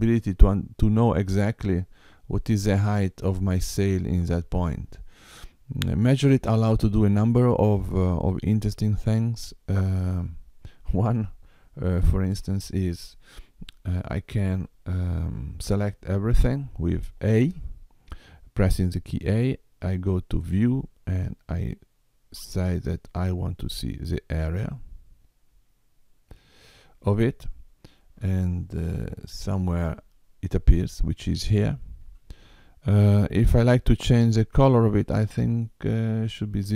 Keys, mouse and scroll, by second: 12.0 Tab, 16.3 a, 20.4 click, 24.4 click, 30.0 middle click.